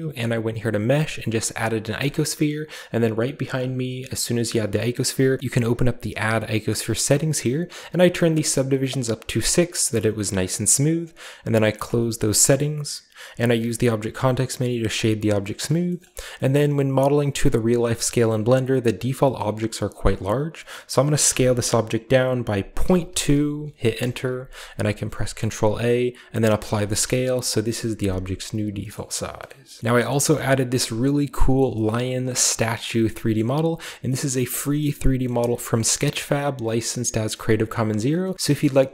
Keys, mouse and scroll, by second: 1.9 click, 3.4 click, 5.6 click, 6.2 click, 7.8 click, 8.0 click, 8.4-13.1 drag, 12.5-13.5 middle drag, 13.7 w, 14.8 click, 15.6-16.3 middle drag, 16.1-17.9 scroll down 1, 16.5-17.9 middle drag, 18.2 middle click, 19.3-21.2 middle drag, 19.5-21.2 scroll up 2, 21.2 s, 22.7 typing, 23.8 Return, 24.5-26.2 scroll up 2, 25.1 ctrl+a, 26.5 click, 27.4 ., 28.5-29.6 scroll down 1, 28.7-29.6 middle drag, 29.7-30.5 typing, 29.8 middle click, 33.2 middle click, 34.2-35.8 middle drag, 34.3 click.